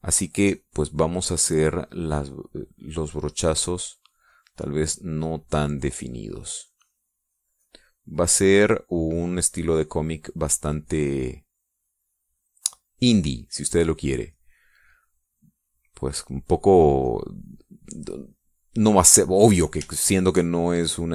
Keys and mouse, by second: 2.2-7.2 drag, 7.3-11.4 drag, 12.6-14.7 drag, 17.8-20.5 drag, 20.6 shift+click.